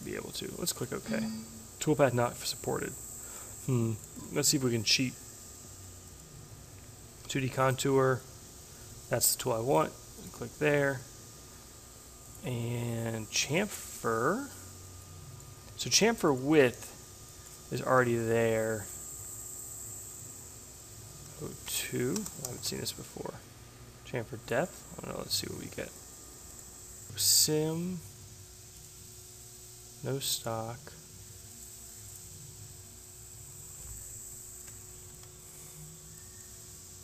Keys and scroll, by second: 17.5 0, 21.2 Delete, 21.7-23.1 typing.